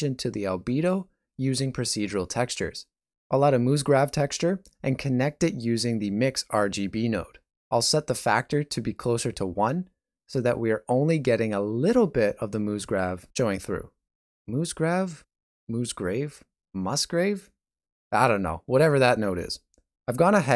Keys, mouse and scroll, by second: 1.8-2.1 scroll, 5.7 scroll.